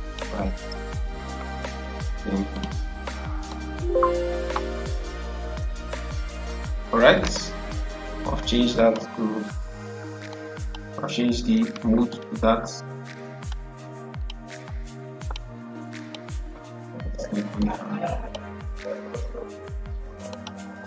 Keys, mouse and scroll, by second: 2.4-19.5 drag, 19.5 scroll down 1, 20.2 click.